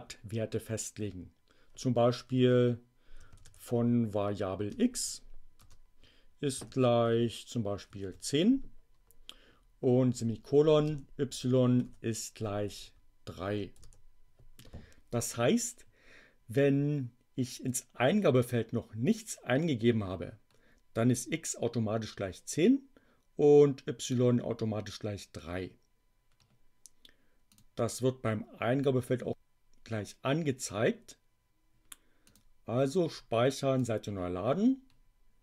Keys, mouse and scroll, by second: 2.5 shift+0, 3.3 shift+2, 4.6-8.5 typing, 10.1 shift+,, 11.7 shift+0, 12.6 3, 27.5 click, 32.1 click, 33.7 click.